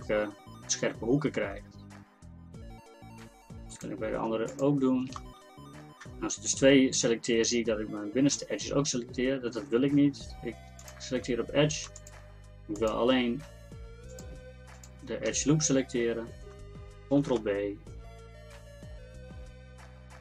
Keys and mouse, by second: 0.7 Tab, 17.1 ctrl+b.